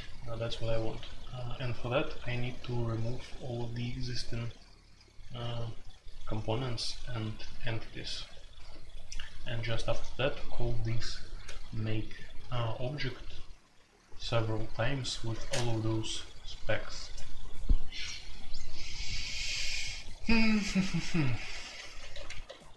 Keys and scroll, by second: 15.3 space, 15.4 Tab, 21.6-22.7 typing.